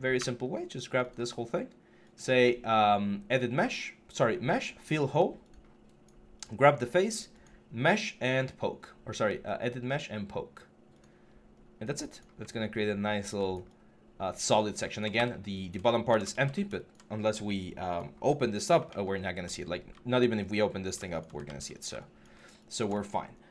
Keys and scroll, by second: 11.3 3, 14.9 w, 16.1 ctrl+z, 21.2 ctrl+z.